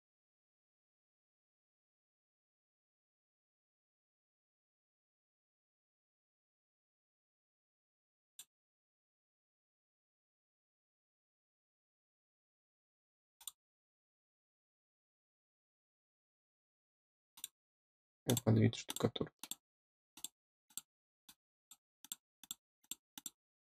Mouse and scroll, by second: 0.1-0.9 scroll up 2, 2.9-3.4 scroll up 4, 4.1-7.5 scroll down 2, 7.5-8.2 scroll up 2, 8.2 click, 13.3 click, 13.9 scroll up 2, 15.2 middle click, 17.3 click, 18.2 click, 18.8 click, 19.3 click, 20.1 click, 20.6 click, 21.2 click, 21.9 click, 22.3 click, 22.7 click, 23.1 click.